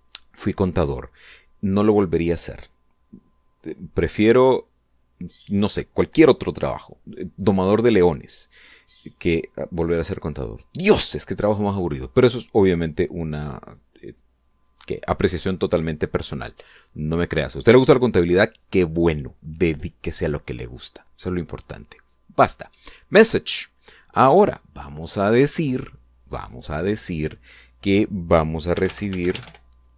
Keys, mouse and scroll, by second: 22.2 click, 23.8 click, 25.5 click, 29.4-29.9 typing.